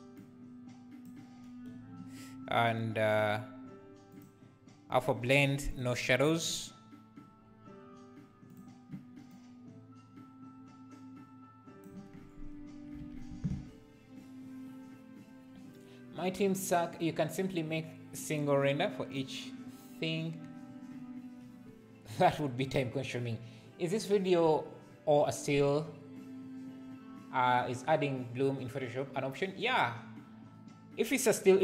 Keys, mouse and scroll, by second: 0.1 click, 5.1-8.9 drag, 9.4-13.0 drag, 13.0 alt+a.